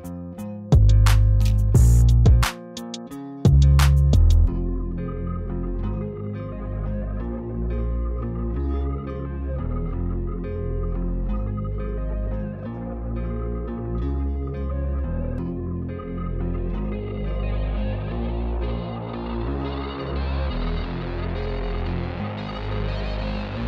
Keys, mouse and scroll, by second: 1.7 click, 3.1 click, 3.2 Down, 5.2 click, 6.2 Down, 6.3 click, 9.7 click, 12.3 click, 12.6 ctrl+j, 13.6 click, 14.9 click, 17.3 click, 19.3 Delete, 20.0 click, 21.6 Up, 23.3 click, 23.4 Down.